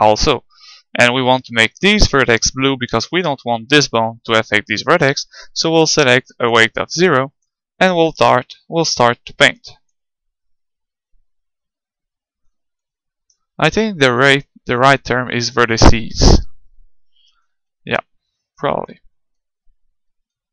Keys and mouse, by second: 6.3-9.8 drag, 10.0-11.9 drag, 13.9-15.1 middle drag, 15.1-16.9 drag, 20.4-20.5 middle drag.